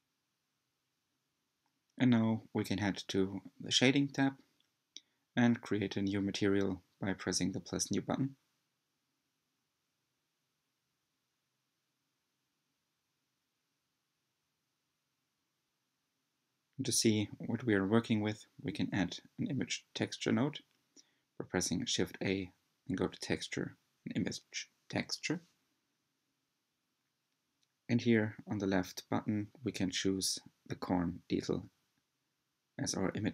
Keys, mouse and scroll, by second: 0.0 click, 4.1 click, 5.0-6.9 scroll up 1, 6.9 scroll down 2, 11.6-13.4 drag, 13.7-14.2 scroll up 4, 14.2-16.9 shift+middle drag, 21.7-23.3 middle drag, 24.2-25.6 drag, 28.3-31.8 drag.